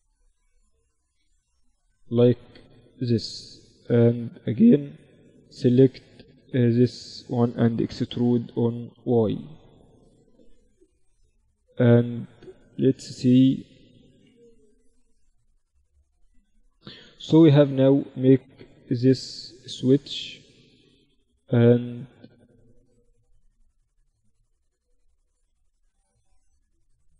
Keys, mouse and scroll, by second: 0.6 ctrl+n, 5.3-7.5 drag, 5.9-7.7 right drag, 7.2 e, 10.3-13.7 drag, 11.5-12.6 right drag, 13.7-19.3 right drag, 13.7 f, 16.1 f, 20.9 f, 23.7 f, 24.9 Tab.